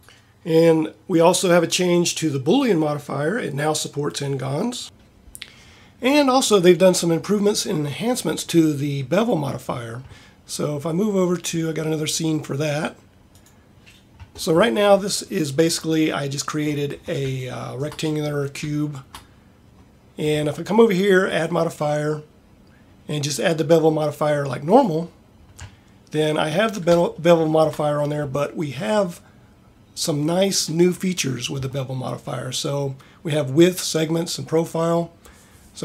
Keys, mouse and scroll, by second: 0.0 ctrl+Up, 21.3 click.